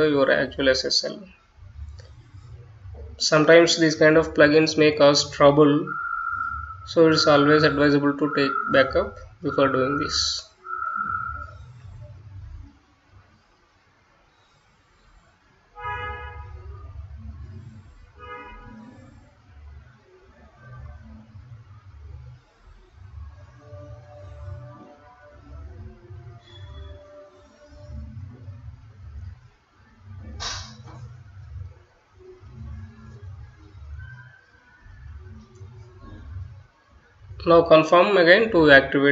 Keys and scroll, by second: 17.6-34.7 typing.